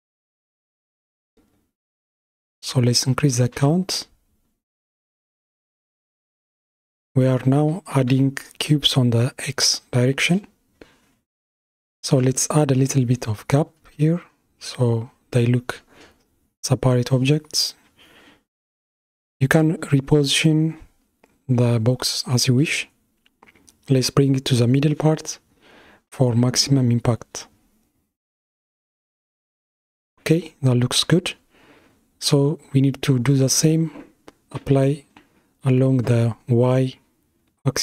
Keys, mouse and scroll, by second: 2.1-7.9 drag, 10.1-13.0 middle drag, 13.0-14.1 drag, 14.1-15.7 middle drag, 15.7 KP_7, 17.7-18.1 scroll down 3, 20.6 g, 27.8-30.9 middle drag, 33.9-35.3 drag, 35.3-35.8 scroll down 2.